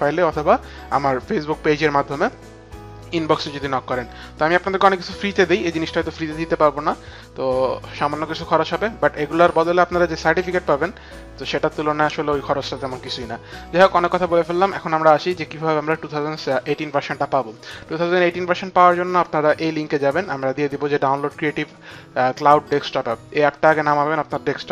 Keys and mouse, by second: 14.8 click.